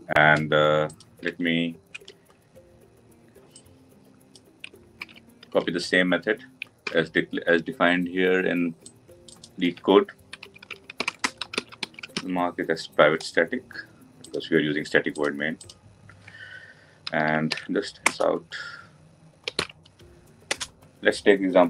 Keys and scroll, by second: 6.6 ctrl+v, 17.9 Return.